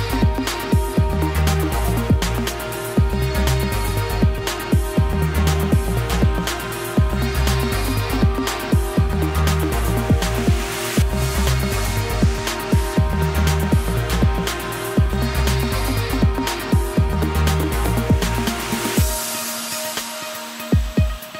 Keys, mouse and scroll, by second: 3.2 2, 3.4 click, 5.1 Delete, 6.4 3, 6.5 click, 6.7-7.4 scroll down 9, 7.4 y, 7.8 g, 9.0-9.4 scroll up 4, 9.4 shift+middle click, 9.6-10.0 scroll up 1, 10.0 shift+middle click, 10.3-10.6 scroll up 2, 10.6 shift+middle click, 11.1 scroll down 1, 11.2 k, 19.6-20.6 scroll up 1, 20.6 k.